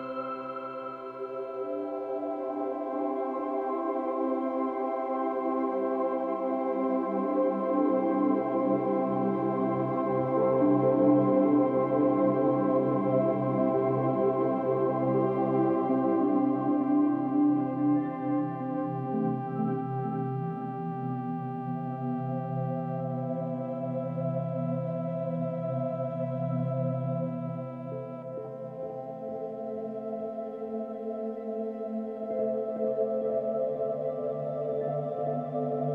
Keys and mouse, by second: 1.0-1.9 drag, 2.1-3.1 ctrl+alt+drag, 3.3 alt+shift+click, 3.8 alt+shift+click, 4.7-16.7 ctrl+alt+drag, 17.7-18.5 drag, 20.6-21.9 alt+drag, 22.2-22.9 alt+shift+drag, 23.4 alt+shift+click, 23.9 alt+shift+click, 25.1 click, 26.9 r, 27.3 x, 27.4 x, 31.2 Escape, 32.0 click, 32.9 r, 33.2 x.